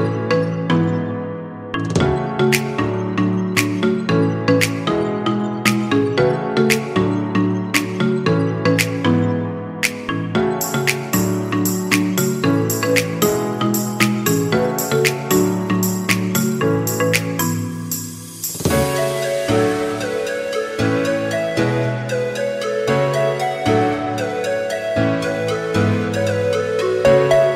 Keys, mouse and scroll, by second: 18.4 click, 20.3 click, 21.4 click.